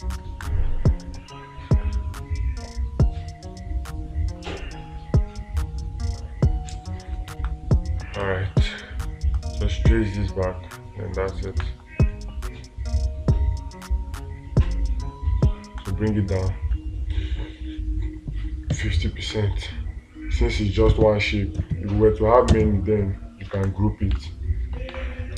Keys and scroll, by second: 0.7 space, 7.9 ctrl+space, 12.0 space, 24.6 space.